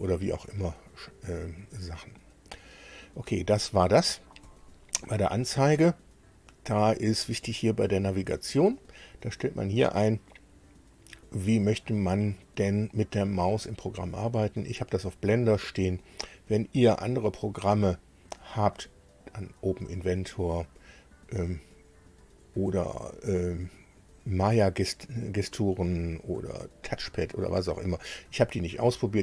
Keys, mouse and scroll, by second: 3.3 click, 4.4 click, 7.6 click, 14.0 click.